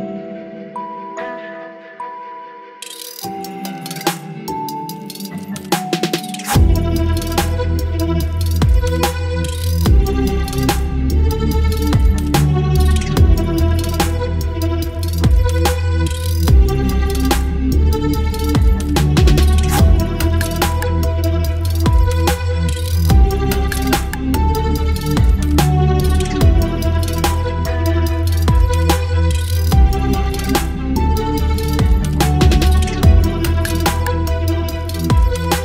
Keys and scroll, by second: 0.1 Delete, 0.4 ctrl+d, 8.0 Delete, 8.5 ctrl+d, 12.6 v, 12.9 Down, 13.4 Down, 14.2 Down, 14.2 Down, 14.3 Down, 17.1 ctrl+BackSpace, 17.5 ctrl+d, 17.7 ctrl+v, 19.3 ctrl+e, 22.4 l, 26.1 Delete, 26.4 ctrl+d, 32.0 Delete, 32.3 ctrl+d, 34.9 space.